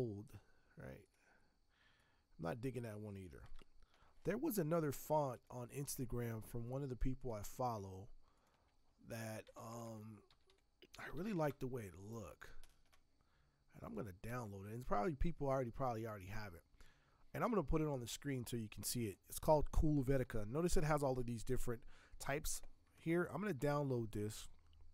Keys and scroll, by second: 3.4 ctrl+Return, 9.2-11.8 typing.